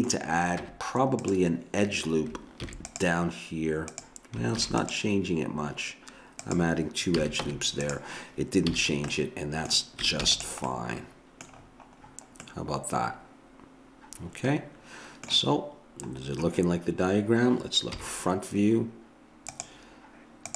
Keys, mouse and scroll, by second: 0.7 Tab, 2.6 ctrl+r, 4.6 ctrl+r, 7.2 a, 7.5 Tab, 8.6 a, 8.8-10.3 middle drag, 10.3 ctrl+s, 17.9 KP_1.